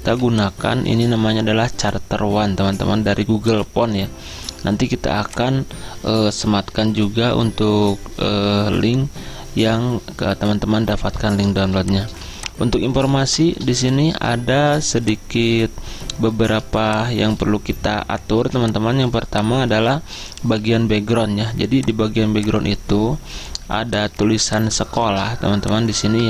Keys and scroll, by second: 15.3-16.0 typing, 17.1-20.7 typing, 23.8 z.